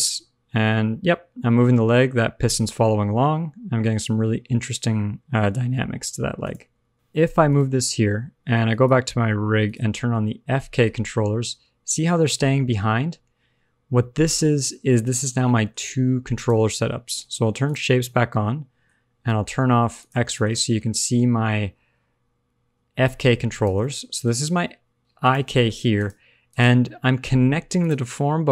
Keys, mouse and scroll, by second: 0.0 g, 6.7 alt+r, 6.8 alt+g, 6.9-7.5 scroll up 1, 6.9 KP_3, 8.6 click, 9.6 shift+click, 10.0-11.0 scroll down 3, 10.2 middle click, 11.0 g, 15.2 middle click, 15.8 g, 17.6 click, 18.0 middle click, 19.0-19.9 scroll up 1, 19.9 click, 20.3 shift+middle click, 20.6 middle click, 22.0 g, 23.9 shift+middle click, 24.2 g, 25.5 shift+middle click, 25.8 scroll up 1, 26.0 click, 26.4 click, 27.8 click.